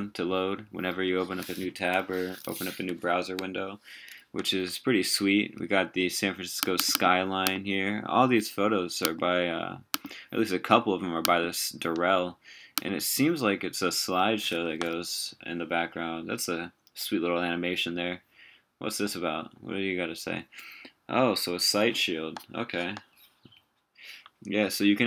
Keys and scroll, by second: 1.6 super+t, 14.7 super+w.